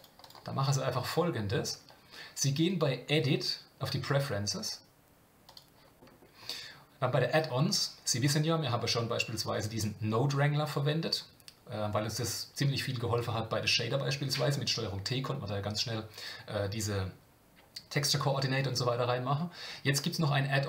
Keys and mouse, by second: 2.7-6.3 drag.